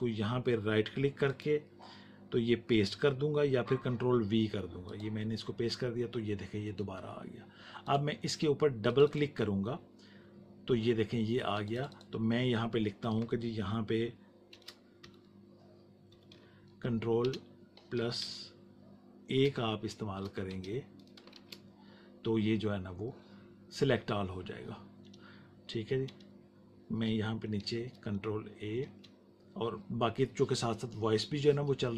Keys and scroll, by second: 14.4-17.2 typing, 20.4 space, 21.3 shift+a, 28.8 space.